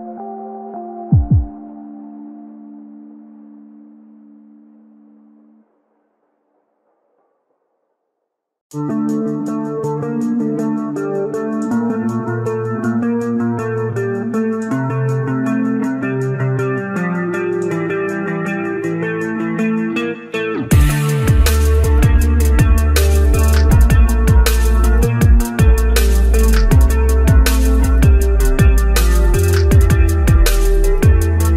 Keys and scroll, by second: 31.1 ctrl+z.